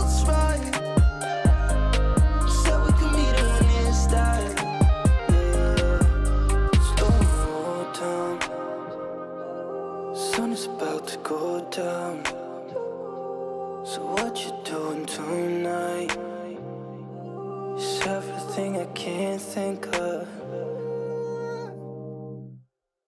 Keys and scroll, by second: 3.6 ctrl+space, 21.0 ctrl+space.